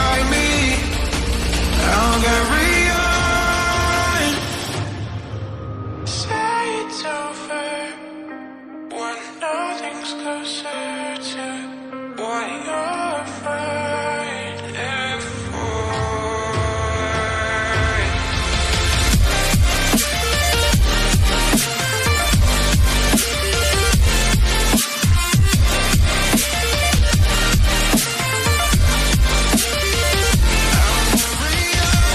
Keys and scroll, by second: 12.7 Up, 17.4 Up, 21.0 shift+Up.